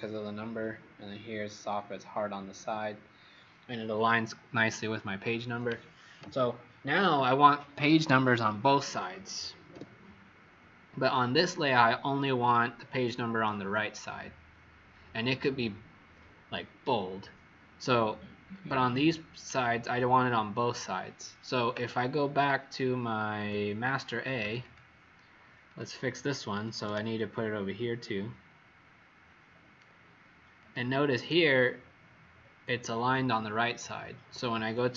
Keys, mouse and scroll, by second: 9.7 w, 18.6-19.3 scroll down 6, 23.3 click, 24.5 click, 25.6 click, 30.5 click.